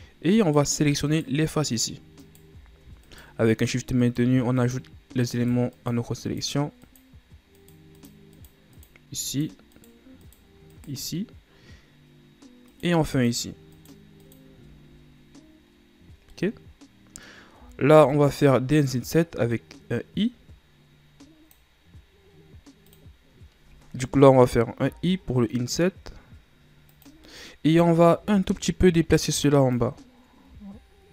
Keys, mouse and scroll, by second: 0.4 right click, 1.0 shift+right click, 1.6 shift+right click, 2.1 shift+right click, 3.0 shift+right click, 3.4 shift+right click, 4.0 shift+right click, 4.5 shift+right click, 5.3 shift+right click, 5.7 shift+right click, 6.2 shift+right click, 6.8 shift+right click, 7.5 shift+right click, 7.9 shift+right click, 8.3 shift+right click, 8.6 shift+right click, 9.2 shift+right click, 9.7 shift+right click, 10.2 shift+right click, 10.6 shift+right click, 12.6 shift+right click, 13.1 shift+right click, 13.7 shift+right click, 14.2 shift+right click, 16.0 scroll down 1, 16.3-17.6 middle drag, 17.6-18.1 shift+scroll up 1, 18.1-19.9 middle drag, 19.9 scroll up 1, 23.1 click, 27.4-28.5 middle drag, 28.5 ctrl+scroll down 2, 28.9-29.9 scroll up 1, 29.9-31.1 drag.